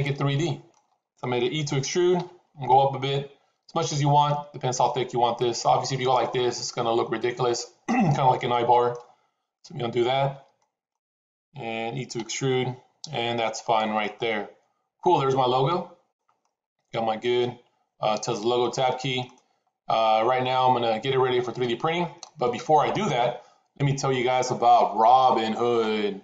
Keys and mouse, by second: 2.0 e, 6.2-8.8 middle drag, 9.5 ctrl+z, 10.5 middle click, 12.1 e, 13.9-16.0 middle drag, 16.3-18.5 middle drag, 18.6 Tab, 19.1-21.5 middle drag, 22.1-24.4 middle drag.